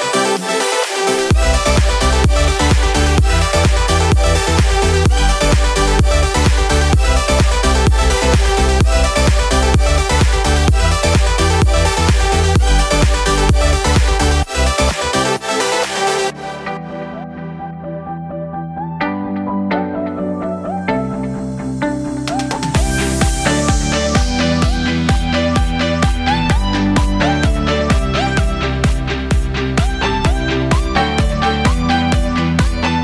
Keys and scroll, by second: 1.1 ctrl+z, 8.4 Down, 8.7 Up, 16.9 ctrl+z, 19.2 Delete, 21.1 ctrl+c, 21.2 ctrl+v, 25.0 Right, 25.5 Left, 26.0 Right, 30.1 Delete.